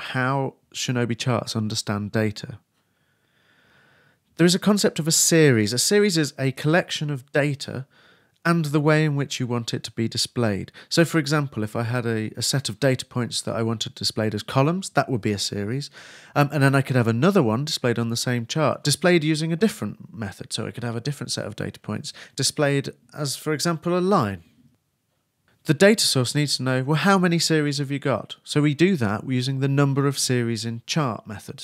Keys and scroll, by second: 30.0 shift+Return, 30.3 shift+[, 30.4 shift+Return.